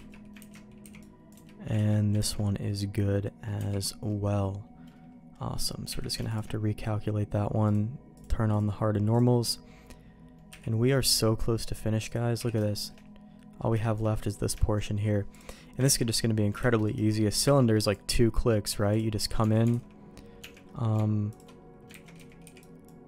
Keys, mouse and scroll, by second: 0.1 ctrl+q, 0.3 ctrl+x, 0.8 c, 1.7 ctrl+q, 2.1 ctrl+x, 2.6 middle click, 3.5 Tab, 4.0 middle click, 5.8 q, 7.6 click, 8.1 click, 9.1 click, 10.5 h, 11.0 click, 12.0 click, 12.3 h, 12.6 shift+middle click, 13.3 middle click, 13.8 shift+middle click, 14.3 scroll down 1, 14.6 middle click, 15.3 click, 15.8 ctrl+s, 16.6 shift+d, 17.4 m, 19.4 Tab, 19.7 alt+a, 20.3 Tab, 21.3 alt+click, 22.0 ctrl+x, 22.1 z, 22.4 b.